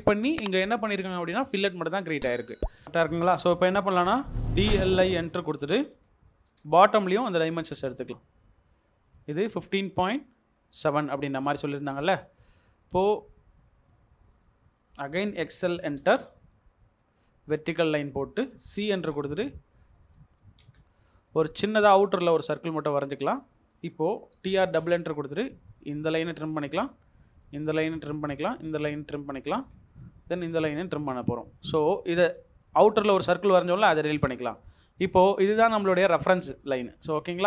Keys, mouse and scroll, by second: 0.4-1.1 scroll up 1, 1.7 scroll down 1, 2.1 scroll up 1, 3.0 middle click, 4.2-6.8 typing, 5.5 Escape, 7.0-7.5 scroll up 1, 7.5 middle click, 11.5 scroll down 1, 12.5 middle click, 15.0-16.3 typing, 17.9 Escape, 18.6-19.4 typing, 20.1 Escape, 20.4 typing, 23.6 Escape, 24.1-24.8 typing, 26.3 click, 26.7 middle click, 26.8-27.2 scroll down 1, 27.7 double click, 30.5 double click, 31.1 Escape, 31.3 middle click, 33.8 Delete, 34.3 Delete, 34.7-35.8 scroll up 1.